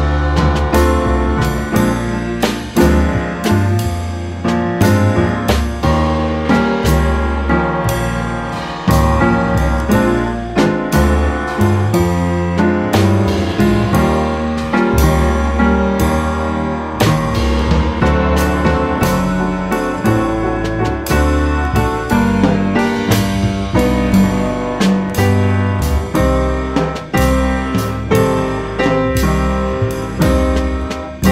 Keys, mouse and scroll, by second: 0.0-0.5 middle drag, 0.5-0.9 scroll up 1, 0.9 click, 1.6 g, 2.8-3.2 middle drag, 3.2 click, 3.4-3.8 middle drag, 3.8 click, 4.0 middle click, 4.3 g, 6.3-6.8 middle drag, 6.8 click, 7.1-7.8 middle drag, 7.8 scroll up 1, 8.0-9.2 middle drag, 9.2 click, 9.4-10.6 middle drag, 10.6 shift+a, 13.3 g, 15.0 s, 16.4 s, 17.8 middle click, 18.1 scroll down 1, 18.9 ctrl+2, 19.5 Tab, 20.0 ctrl+r, 21.6 click, 22.0 Tab, 22.9 s, 25.6 shift+d, 27.3 click, 29.0 s, 30.8-31.3 middle drag.